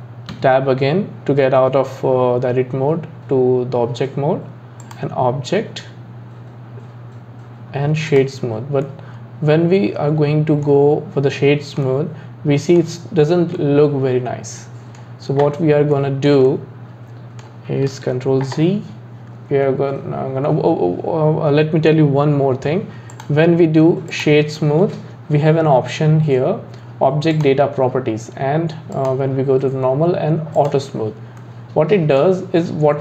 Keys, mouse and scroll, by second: 0.3 Tab, 4.8-8.0 drag, 8.9-18.0 middle drag, 18.0 ctrl+z, 23.1-26.3 drag, 27.3 click, 28.9-30.7 drag, 31.4-33.0 middle drag.